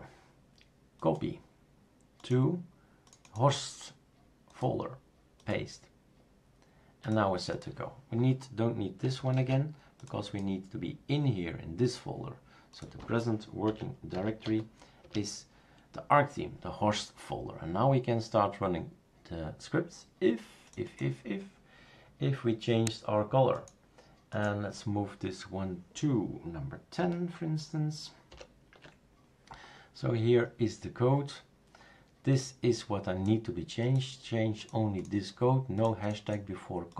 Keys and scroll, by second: 9.4 super+q, 13.4-14.9 typing, 15.0 Return, 28.3 super+0.